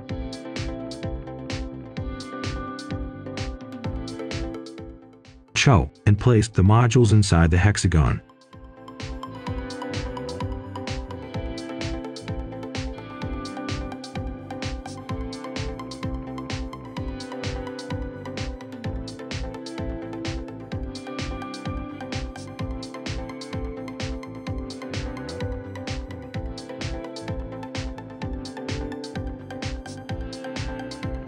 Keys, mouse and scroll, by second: 0.9 click, 3.2 Escape, 3.7 right click, 4.1 click, 4.5-5.5 typing, 5.5 Return, 6.8 click, 7.5-8.5 typing, 10.0 click, 13.0-13.7 scroll up 1, 13.7 right click, 15.1 click, 15.4-16.2 scroll down 1, 16.2 scroll up 1, 16.4 Escape, 16.8 right click, 17.9 click, 18.4-18.8 scroll up 1, 18.8 right click, 19.6 click, 19.9 right click, 20.6 Escape, 21.2 right click, 22.0 click, 23.7 Escape, 24.1-24.4 scroll down 1, 24.4 right click, 24.9 click, 25.8 Delete, 26.7 click, 26.9 right click.